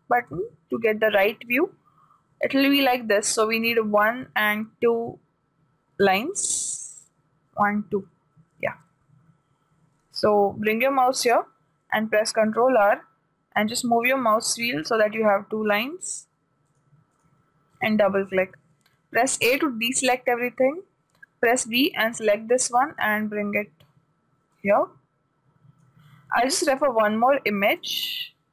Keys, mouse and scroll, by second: 12.7 ctrl+r, 19.9 a, 21.8 b, 23.6-25.4 drag.